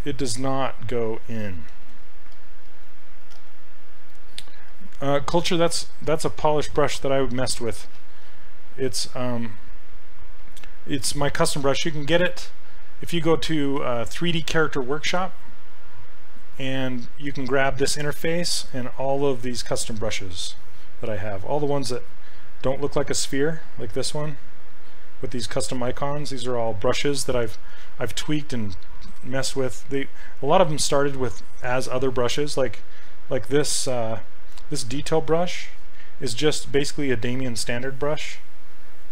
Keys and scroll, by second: 1.8 ctrl+z, 2.3 s, 3.4 s, 8.0 s, 8.9 s, 35.8 s.